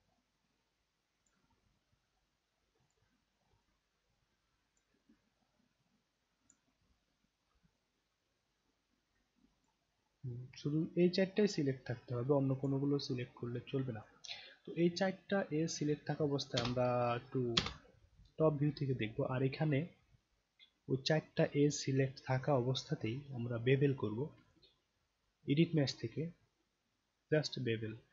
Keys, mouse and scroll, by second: 0.1-1.2 alt+drag, 2.8 shift+click, 3.6-4.8 alt+drag, 6.4 shift+click, 7.1 scroll down 1, 7.7-9.6 alt+drag, 9.8 alt+right click, 10.6-12.6 alt+drag, 12.9 alt+scroll up 1, 13.4-14.0 alt+drag, 14.4-14.7 alt+scroll up 1, 14.9-15.7 alt+drag, 16.6 space, 17.5 space, 24.4 click.